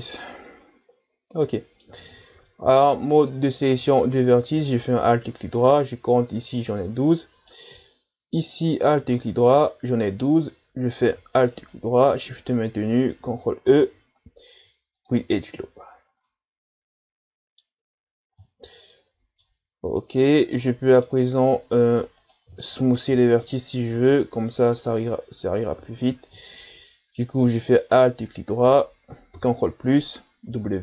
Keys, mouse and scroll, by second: 2.3 ctrl+Tab, 4.1 alt+right click, 7.2-8.5 middle drag, 8.5 alt+right click, 11.5 alt+shift+right click, 13.6 ctrl+e, 15.9-16.3 scroll down 1, 16.3-17.9 middle drag, 17.9-18.4 scroll up 3, 18.4-20.1 middle drag, 20.1 right click, 20.7-22.2 middle drag, 22.2 alt+right click, 23.1 ctrl+KP_Add, 25.7 w, 27.9 alt+right click, 29.4 ctrl+KP_Add, 30.5 w.